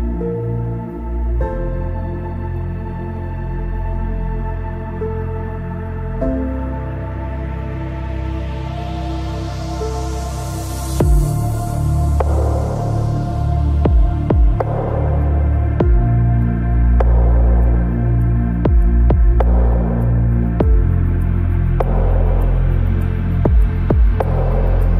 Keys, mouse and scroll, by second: 0.5 ctrl+s, 3.0 ctrl+Tab, 4.7 c, 15.6-17.8 middle drag, 16.4 c, 21.9 KP_Decimal, 22.6-24.4 middle drag.